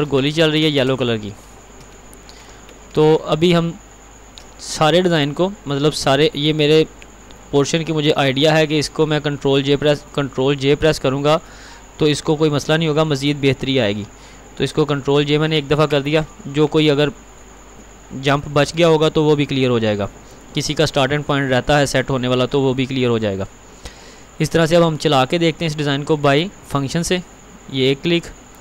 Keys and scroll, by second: 0.5 ctrl+®, 4.3 ctrl+a, 14.9 ctrl+j.